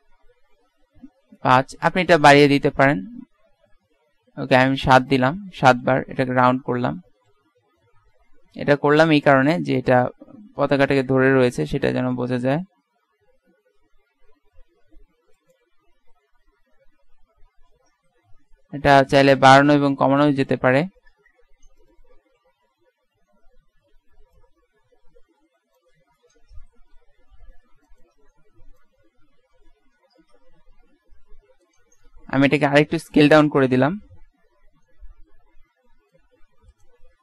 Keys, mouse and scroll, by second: 6.3 KP_1, 6.8 middle click, 8.4 z, 8.8 z, 9.2 Tab, 9.6 Tab, 11.1 middle click, 14.1 Tab, 14.9 z, 15.2 z, 15.6 right click, 15.7 Tab, 16.5 z, 17.1 z, 17.5 z, 19.2 z, 20.4 KP_1, 21.9 click, 22.2 z, 22.9 a, 24.0 b, 27.0 s, 32.1 s, 36.4 Tab, 37.1 Tab.